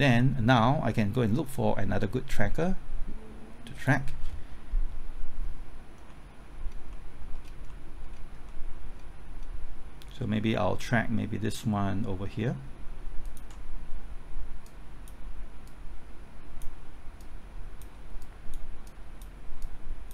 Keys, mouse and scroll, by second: 5.4-6.1 scroll up 1, 6.1 middle click, 6.6-6.9 scroll up 1, 6.9 middle click, 7.3-7.7 scroll up 1, 7.7 middle click, 8.0-8.5 scroll up 1, 8.5 middle click, 9.2-11.9 scroll up 1, 13.2 ctrl+click, 14.6-20.1 drag.